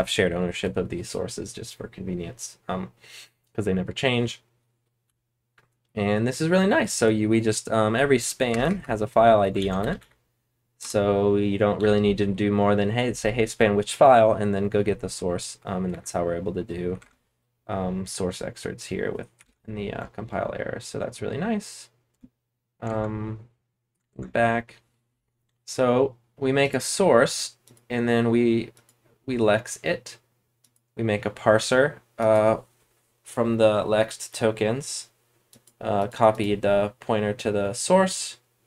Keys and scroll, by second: 0.0-0.1 typing, 5.0-5.5 typing, 8.4-10.4 typing, 10.8 Return, 11.7 j, 15.8 BackSpace, 16.9 super+Tab, 19.4 super+Tab, 19.9 BackSpace, 20.3 BackSpace, 22.1 BackSpace, 22.8 ctrl+Tab, 23.8 ctrl+Tab, 24.0 ctrl+Tab.